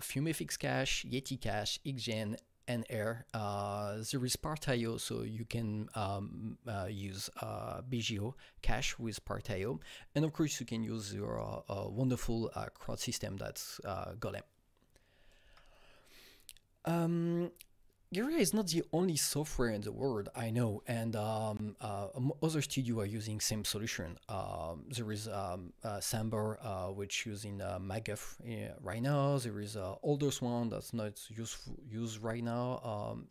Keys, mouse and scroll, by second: 15.5 Right, 19.9 Right.